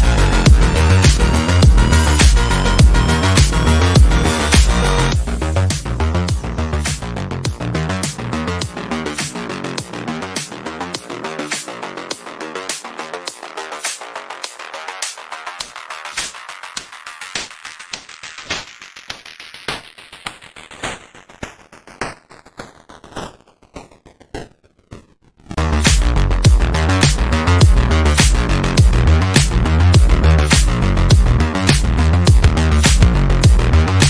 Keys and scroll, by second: 17.1 Escape.